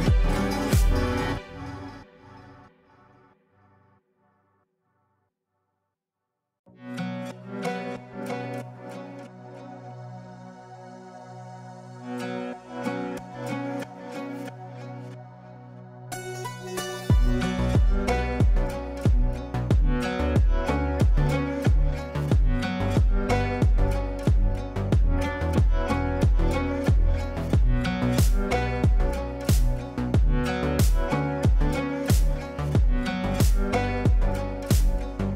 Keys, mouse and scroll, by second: 2.1 ctrl+space, 3.4-9.1 drag, 9.1 ctrl+space, 10.2-12.7 shift+drag, 12.7 click, 13.7 F3, 14.3 F2, 14.5-19.8 drag, 20.7 l, 21.2 click, 24.5 shift+click, 25.4 v, 26.5 b, 27.2-30.5 drag, 30.5 ctrl+right click, 30.9 click, 32.0 ctrl+a, 33.1 w, 33.3 w, 33.7 w.